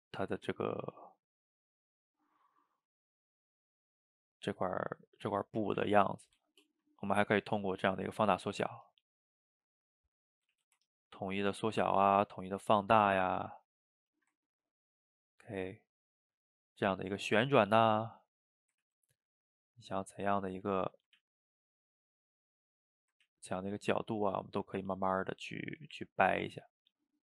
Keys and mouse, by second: 0.2 f, 1.0 click, 2.0 middle click, 2.9 click, 3.5-7.7 middle drag, 7.7 click, 8.1 middle click, 8.6 f, 9.2-10.4 drag, 10.4 middle click, 10.6 ctrl+z, 10.9-12.0 ctrl+drag, 12.0 ctrl+middle click, 12.3 ctrl+z, 12.6-14.0 ctrl+drag, 14.0-17.1 shift+middle drag, 17.1-18.9 drag, 18.9 ctrl+z, 19.1 middle click, 19.6-20.8 drag, 20.8 middle click, 21.2 ctrl+z, 21.4-22.8 drag, 22.8 middle click, 23.3 ctrl+z, 23.6-25.4 drag, 25.4 middle click, 25.9-26.9 drag, 26.9 ctrl+z.